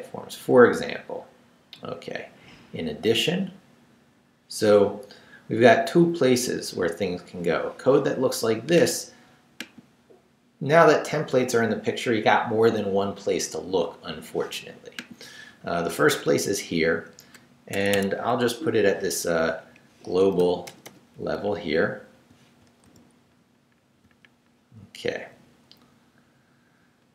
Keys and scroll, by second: 16.2 Up, 17.7 Escape, 18.3 Up, 19.6 Up, 20.4 i, 20.6 Return, 21.3 Up, 22.0 super+Up, 22.8 super+v, 25.3 Left.